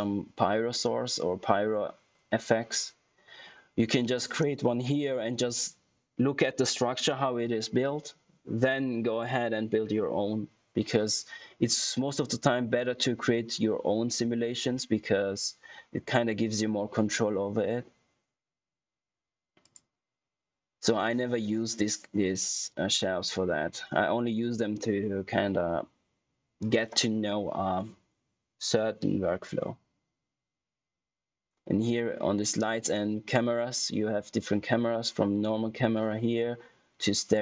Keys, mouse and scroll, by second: 19.6 click.